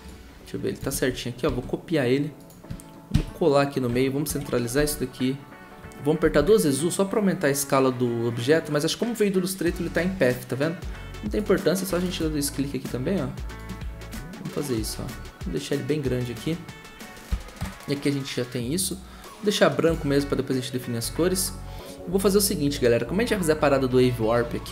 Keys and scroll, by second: 0.9 ctrl+z, 1.4 ctrl+c, 3.1 ctrl+v, 4.3 ctrl+Home, 4.7 s, 6.2 typing, 17.6 Return.